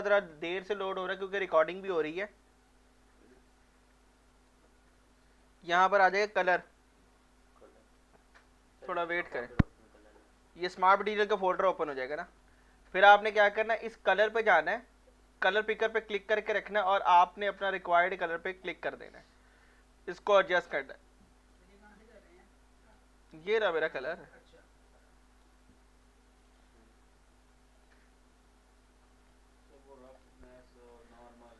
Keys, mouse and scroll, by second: 4.5-6.3 drag, 14.3-23.4 drag, 23.4-26.5 right drag, 26.5 click, 28.0 click, 29.7-31.1 drag, 31.1 alt+click.